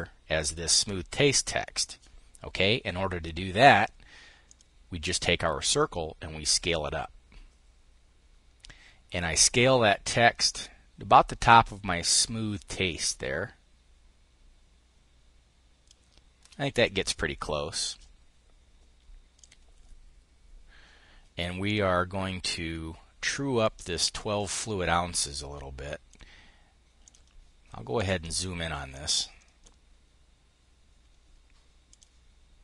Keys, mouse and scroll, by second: 4.0 click, 6.3-16.5 ctrl+shift+drag, 19.0 click, 21.2 click, 23.2-26.3 drag, 26.6-27.6 drag, 28.4 click, 31.4 click.